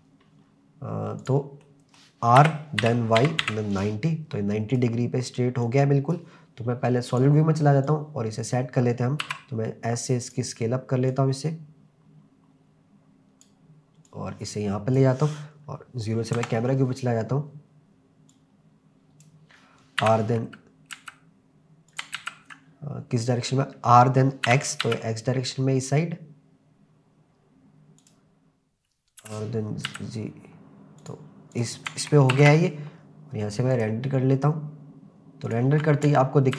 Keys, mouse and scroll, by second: 0.3-0.7 scroll up 1, 1.2 click, 1.6-2.0 middle drag, 2.4 r, 2.8 y, 3.2 9, 3.4 0, 3.7 click, 4.7 click, 5.6 click, 7.2 click, 7.8 click, 9.2 s, 10.3 click, 11.1 click, 14.1 click, 16.4 KP_0, 18.3 click, 19.4 n, 20.0 r, 21.0 z, 21.9 click, 22.2 ctrl+z, 23.2 click, 24.5 r, 24.8 x, 28.0 click, 29.2 g, 29.9 z, 31.0 click, 31.5 click, 32.4 ctrl+s, 34.1 click, 35.5 click.